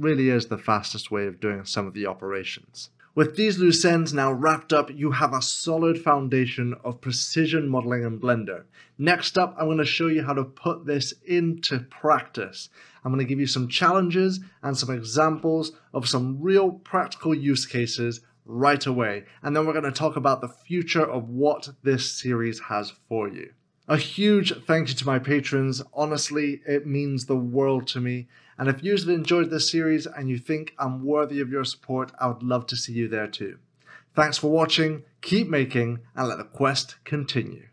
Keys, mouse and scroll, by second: 0.9-1.8 scroll down 1, 1.8 middle click.